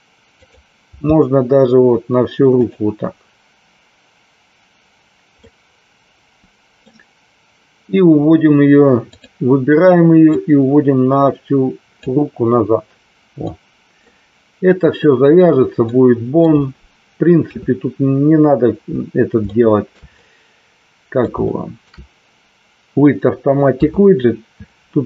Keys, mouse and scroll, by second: 0.4 click, 0.8 g, 2.6 click, 5.4-6.8 middle drag, 9.0 click, 10.3-12.0 drag, 13.4 middle click, 15.8 middle click, 17.4 KP_3, 19.4 shift+middle click, 20.1-21.1 middle drag, 21.4 shift+middle click, 23.6 KP_3.